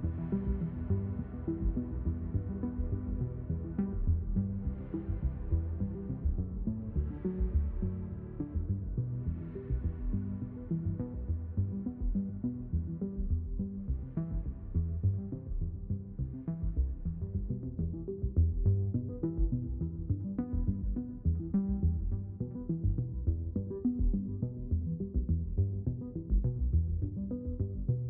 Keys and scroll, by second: 2.2 space, 7.0 space, 22.4 space, 26.9 space.